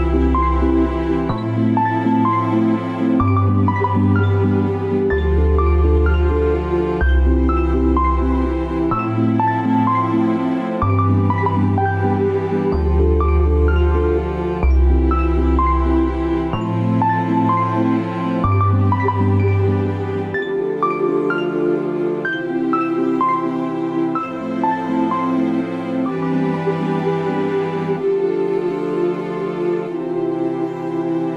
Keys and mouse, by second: 16.7 click, 17.0 Tab, 18.3 ctrl+s, 19.0-19.8 middle drag, 20.6-21.5 shift+middle drag, 21.7-22.3 middle drag, 23.6 click, 28.3-29.6 middle drag.